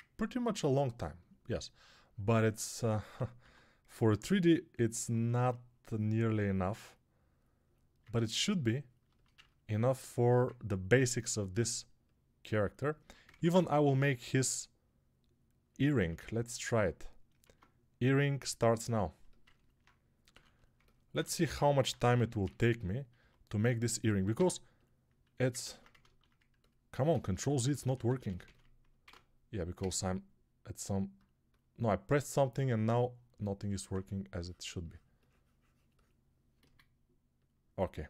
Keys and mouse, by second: 3.3 x, 13.1 ctrl+Tab, 13.4 shift+a, 17.3 Tab, 20.2 3, 20.7-38.0 middle drag, 21.9 c.